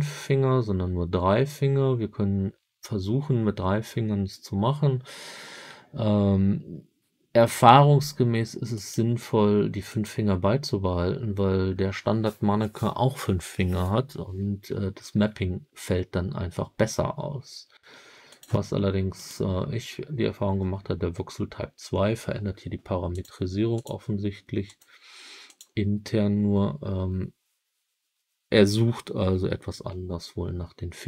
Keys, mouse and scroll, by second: 8.7 click, 18.2-19.3 drag, 23.1-23.8 drag, 24.6-25.5 drag.